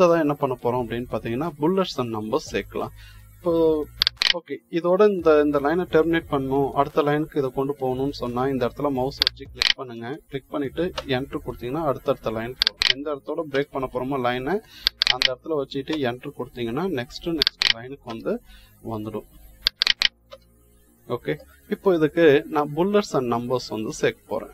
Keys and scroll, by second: 10.8 Return, 13.4 Return, 15.8 Return, 17.9 Return, 20.1 Return.